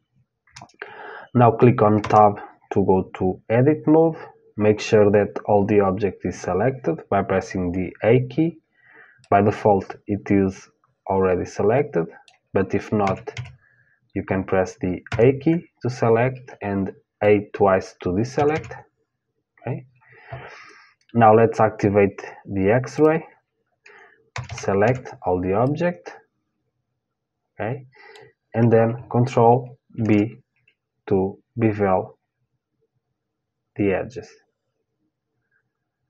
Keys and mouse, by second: 1.6 Tab, 8.8-10.8 middle drag, 12.6 a, 12.9 a, 14.7 a, 18.0 a, 18.1 a, 22.6-24.6 drag, 23.9 a, 24.1 a, 24.4 a, 25.2-27.3 middle drag, 29.5 ctrl+b.